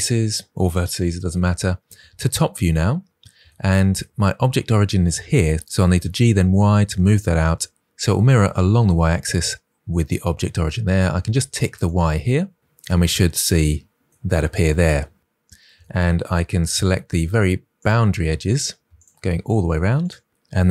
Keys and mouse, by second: 1.7 KP_7, 5.5 y, 5.7 g, 5.9 y, 11.7 click, 16.6 2, 17.7 alt+click, 18.8 alt+click, 19.9 alt+click.